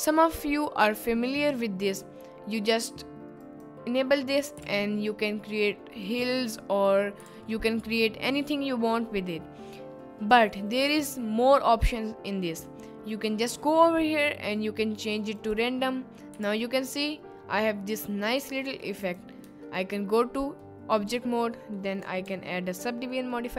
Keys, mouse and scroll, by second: 3.4 click, 4.6 g, 7.2 g, 7.3 z, 10.3 click, 13.2-15.9 drag, 16.3 g, 16.5 z, 19.0 click, 19.5 Tab, 19.9 click, 21.8 middle click, 22.2 ctrl+1, 23.2 middle click.